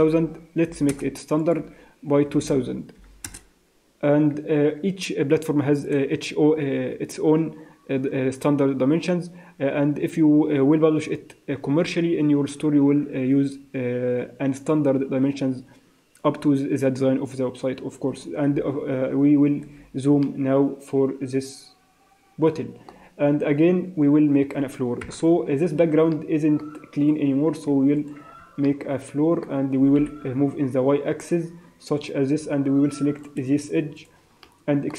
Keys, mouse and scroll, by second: 0.2 0, 1.4 click, 2.4 0, 18.5 n, 19.6 n, 20.2 ctrl+middle click, 25.0 KP_0, 25.3-26.1 scroll down 10, 26.1 middle click, 26.9 right click, 27.7 Escape, 27.9 click, 28.4 Tab, 28.6 middle click, 29.7 g, 33.2 click, 33.9 shift+click, 34.4 middle click.